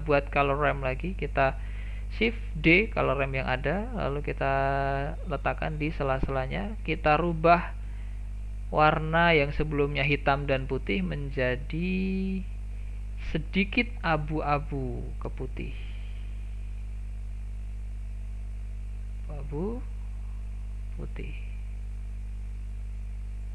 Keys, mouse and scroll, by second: 0.1 click, 2.7 shift+d, 6.2-7.4 scroll up 8, 7.4-10.0 shift+middle drag, 10.0-12.0 drag, 12.7 click, 19.1-23.5 drag.